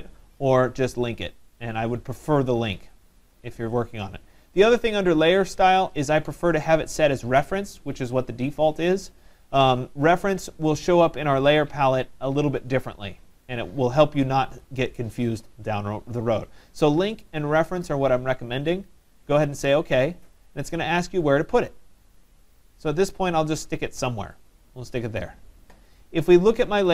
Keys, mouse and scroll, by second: 19.9 click, 24.5 click.